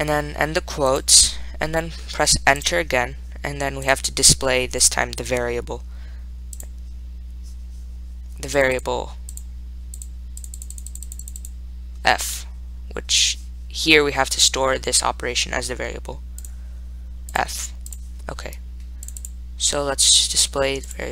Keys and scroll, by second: 2.9 Return, 5.1 Right, 6.8 3, 8.8 Up, 9.0 Up, 9.6 Down, 10.2 Up, 10.8 Right, 11.0 Right, 11.1 Right, 11.3 Right, 11.5 Right, 11.7 Right, 19.3 Down, 19.5 Down.